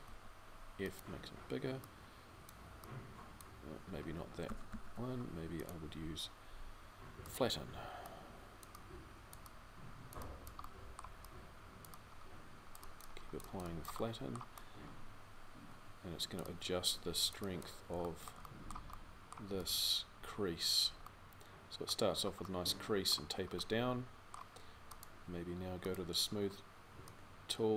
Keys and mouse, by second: 4.3 ctrl+z.